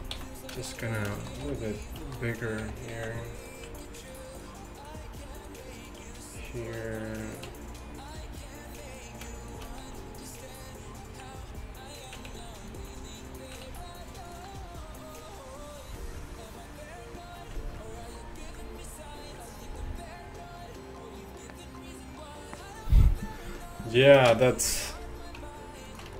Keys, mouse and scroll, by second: 0.0 Tab, 0.2 z, 1.0 click, 1.5 b, 1.7-3.2 drag, 2.7 g, 9.9 s, 12.4 s, 13.7 s.